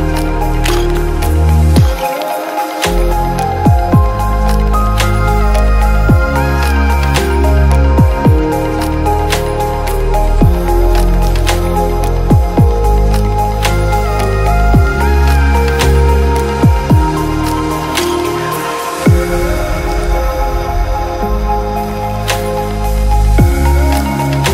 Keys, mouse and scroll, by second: 0.5 shift+d, 1.0 shift+s, 1.8 s, 2.0 click, 2.1 alt+d, 2.5 shift+s, 3.2 scroll up 1, 3.4 click, 3.7 alt+d, 3.9 shift+click, 4.2 shift+s, 4.9 click, 5.0 middle click, 5.8 shift+click, 7.0 middle click, 7.6 shift+s, 8.0 click, 8.6 click, 8.9 click, 9.2 click, 9.7 middle click, 10.3 middle click, 11.4 click, 12.6 click, 12.7 shift+click, 13.0 alt+d, 13.4 click, 14.0 shift+click, 14.7 click, 16.2 alt+d, 16.7 click, 16.8 g, 17.2 click, 17.4 g, 17.8 ctrl+click, 18.4 click, 18.5 click, 18.6 click, 20.2 alt+click, 20.5 alt+click, 22.3 click, 23.0 click, 23.0 middle click, 24.4 middle click.